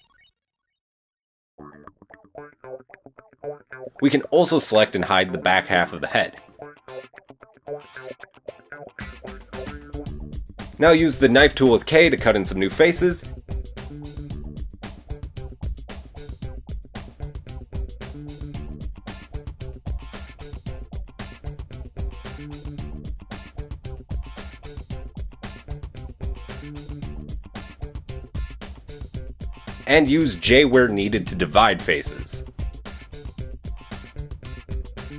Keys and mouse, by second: 2.9 KP_3, 4.2-35.1 drag, 6.2 h, 7.3 KP_1, 23.2 k, 29.6 middle click, 29.6 right click, 30.5 shift+middle click, 30.5 shift+right click, 31.5 j.